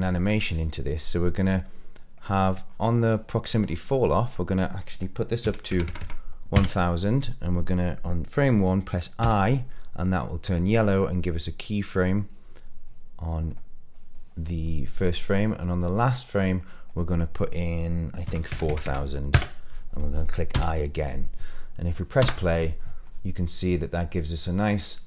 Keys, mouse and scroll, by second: 1.3 click, 2.6-3.0 scroll up 2, 3.0 middle click, 3.6-4.2 scroll up 2, 4.2-6.5 drag, 5.8 KP_0, 5.9 KP_0, 13.4 click, 15.5 click, 16.8-19.3 drag, 18.6 KP_0, 18.8 KP_0, 20.5 i, 21.8 click, 22.1 space, 23.0-23.4 scroll down 2, 23.5-24.3 middle drag, 24.4 scroll up 2, 24.7-25.0 middle drag.